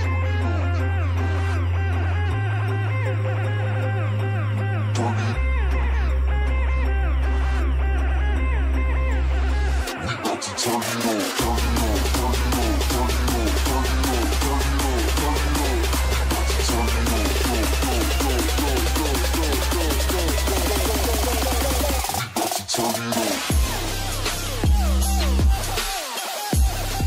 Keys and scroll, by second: 13.9 ctrl+z, 26.3 ctrl+space.